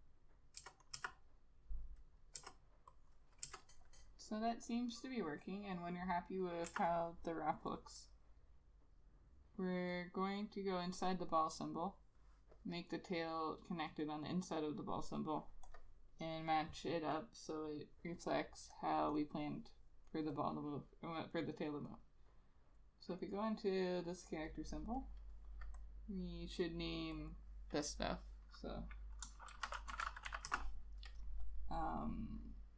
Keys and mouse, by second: 0.7 Return, 1.2 Return, 2.5 Return, 3.6 Return, 6.8 Return, 19.3 double click, 23.3 double click, 27.4 double click, 29.6-30.4 typing, 30.6 Return.